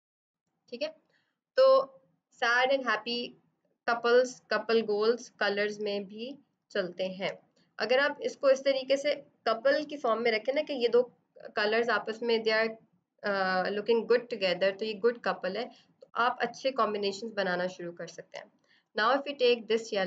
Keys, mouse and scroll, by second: 0.5 click, 6.5 space, 6.8 click, 7.0 space, 17.6 space, 17.8 click, 18.1 space, 18.7 b, 19.4 click.